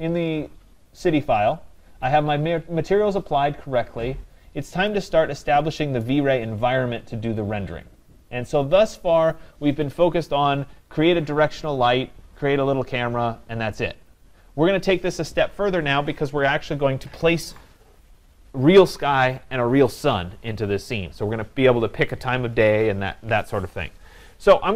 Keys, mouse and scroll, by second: 6.1 right click.